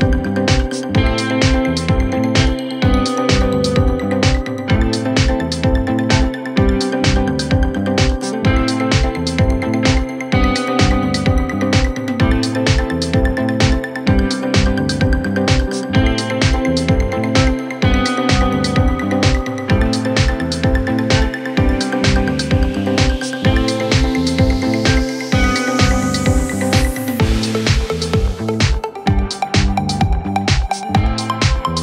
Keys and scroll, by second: 5.0 shift+Page_Up, 11.0 g, 22.7 F3, 23.1 Escape, 28.7 shift+F2, 29.5 Right, 30.4 F3, 31.0 Escape.